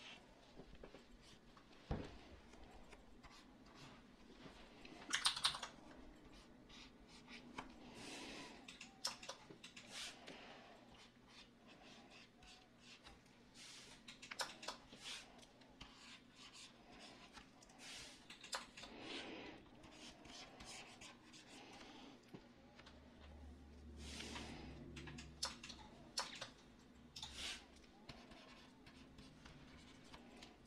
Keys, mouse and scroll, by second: 5.2 ctrl+z, 5.4 ctrl+z.